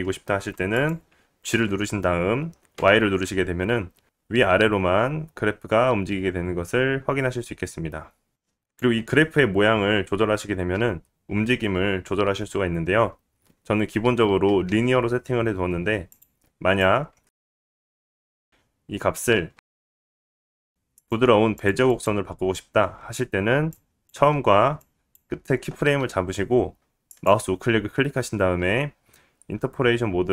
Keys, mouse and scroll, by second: 2.1-11.8 drag, 2.7 g, 11.8 space, 14.8-17.3 drag, 14.8-17.3 middle drag, 15.7 space, 17.4-18.1 middle drag, 18.1 click, 21.1 click, 21.2-22.2 middle drag, 22.2-30.3 right drag, 22.8 click, 22.8 middle click, 25.0-30.3 drag, 25.0-30.3 middle drag.